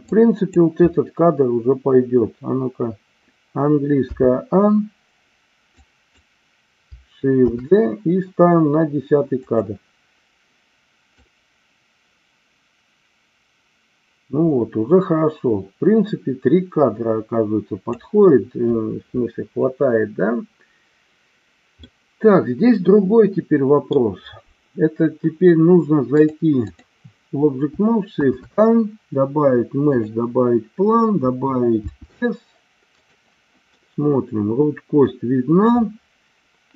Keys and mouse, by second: 0.0 click, 4.1 a, 5.6 click, 7.5 shift+d, 11.2-18.0 drag, 21.8-24.0 middle drag, 26.2 click, 28.2 shift+a, 31.9 s, 33.0 click, 33.8-35.1 middle drag.